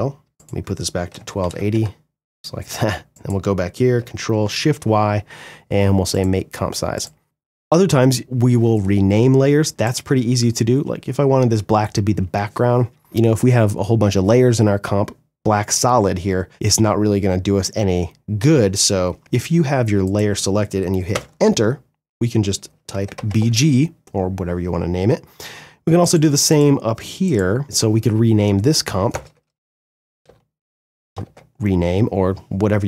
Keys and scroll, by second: 0.3 2, 0.8 Return, 3.5 ctrl+shift+y, 20.3 Return, 22.5 shift+b, 22.7 shift+g, 22.8 Return, 28.2 Return, 29.2 shift+BackSpace, 29.8 shift+m, 30.0 shift+e, 30.3 Return.